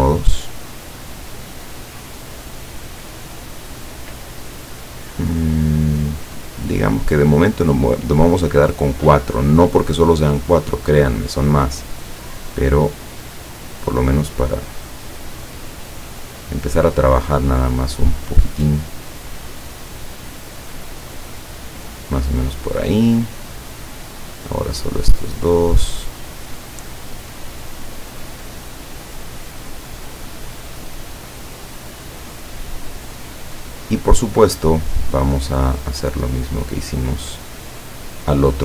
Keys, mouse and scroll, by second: 2.4 click, 6.2 click, 7.9 click, 10.9 click, 12.7-23.0 drag, 23.4 click, 24.5-26.6 drag, 32.8-33.1 scroll down 2, 33.2-33.6 scroll up 2, 36.4 click, 37.9 click.